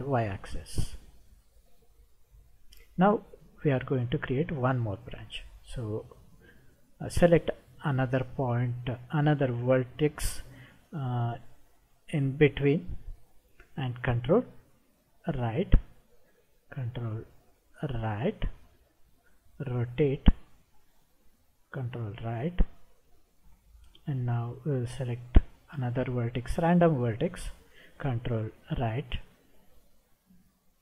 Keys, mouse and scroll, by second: 1.3-2.8 middle drag, 5.9 click, 15.4 ctrl+right click, 18.1 ctrl+right click, 19.1-20.4 middle drag, 22.3 ctrl+right click, 25.8 click, 28.6 ctrl+right click, 29.6-30.8 middle drag.